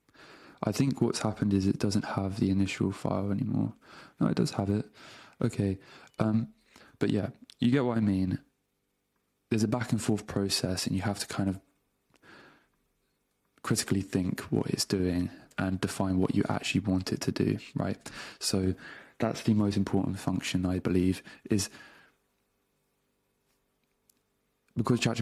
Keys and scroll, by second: 7.0 super+w, 10.1 super+Tab, 14.1 super+Tab, 15.5 BackSpace, 16.1 super+v, 16.6 Return, 17.8 super+Return.